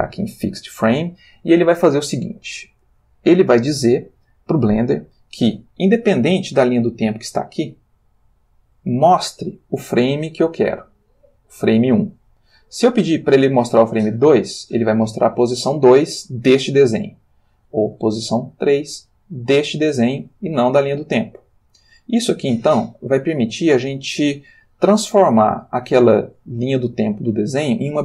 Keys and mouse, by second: 0.2 click, 6.8-9.0 drag, 9.0-10.6 middle drag, 14.2 click, 18.2 click, 21.0-26.7 drag.